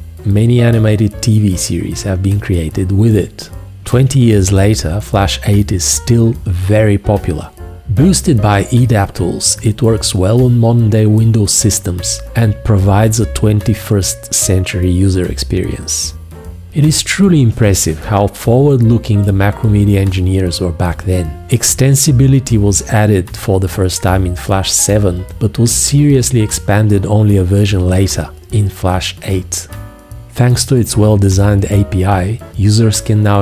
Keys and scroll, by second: 5.7 F1, 6.6 F1, 9.5 F1, 25.0 space, 27.2 h.